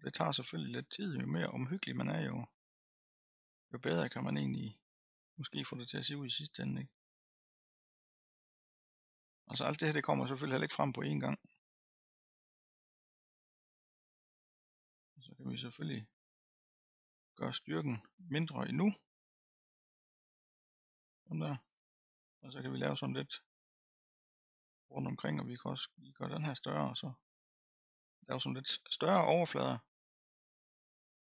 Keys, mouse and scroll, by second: 8.0-10.9 middle drag, 10.9-16.0 drag, 17.5-29.6 drag, 29.6-31.4 middle drag.